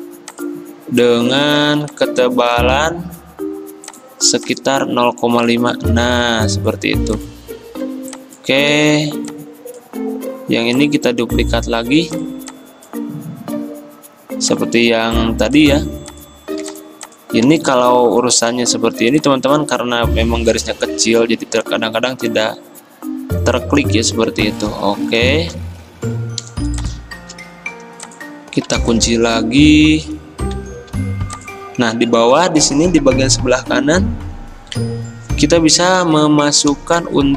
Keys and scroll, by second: 0.6-1.3 typing, 1.8 ctrl+z, 8.8 ctrl+z, 17.9 ctrl+2, 26.1 alt+2, 31.0 2, 36.8 i.